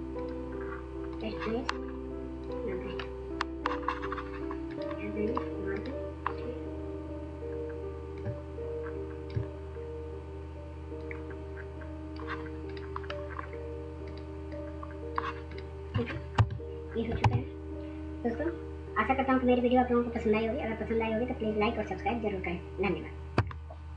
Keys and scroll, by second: 16.3 ctrl+0, 17.2 w.